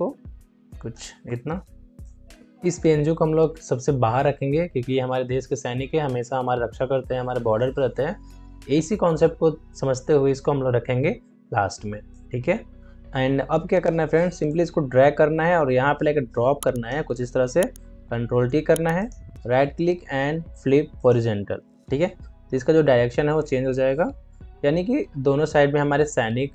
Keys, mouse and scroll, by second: 1.2 Return, 1.9 click, 12.0 Return, 12.3 click, 14.4-17.9 alt+drag, 17.9 ctrl+t, 18.9 right click, 22.7 Right.